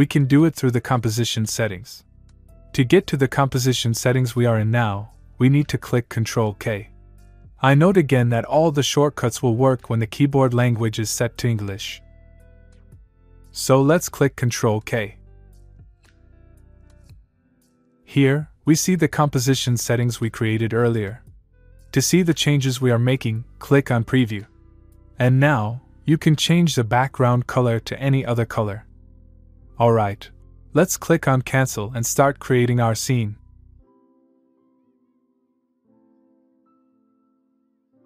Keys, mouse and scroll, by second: 11.0 click, 14.3 click, 16.6 ctrl+Num_Lock, 16.8 ctrl+k, 23.4 click, 27.3-27.7 click, 31.5 click, 32.3 click.